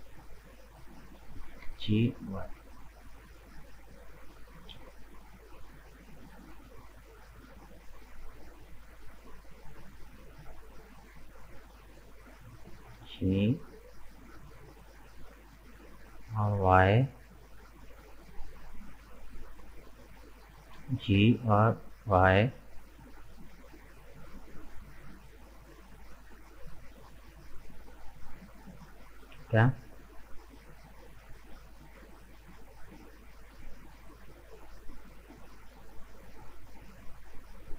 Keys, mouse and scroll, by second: 0.4 right click, 0.7 middle click, 1.7 g, 3.9-5.4 middle drag, 5.4 click, 5.9-7.3 middle drag, 7.3 right click, 7.9 right click, 8.3-11.2 middle drag, 11.2 shift+right click, 11.9-13.0 middle drag, 13.0 g, 16.7-19.0 middle drag, 19.0-20.1 drag, 20.1 right click, 20.9 g, 24.8 scroll down 2, 25.1-28.1 middle drag, 29.4 scroll down 1, 29.6-32.8 middle drag.